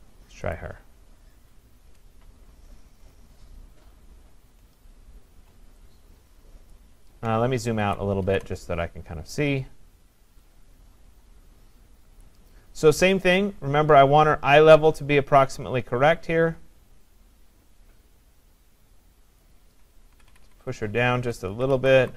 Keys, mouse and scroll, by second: 0.6 click, 2.3-4.7 scroll, 6.8 click, 7.8 ctrl+-, 8.3 ctrl+-, 12.3 click, 14.3 click, 19.4 click, 20.1-21.6 scroll down 8, 20.7-22.1 drag, 22.0 scroll up 3.